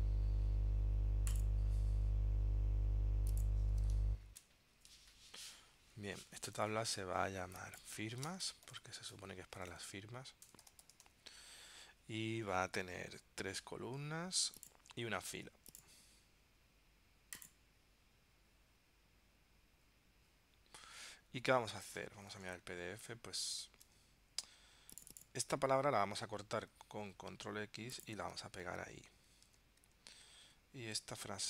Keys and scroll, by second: 4.5 ctrl+alt+super+p, 8.4 shift+f, 22.5 super+Tab, 24.0 super+Tab, 26.8 super+x, 28.8 super+v, 29.8 super+Tab, 30.6 super+Tab.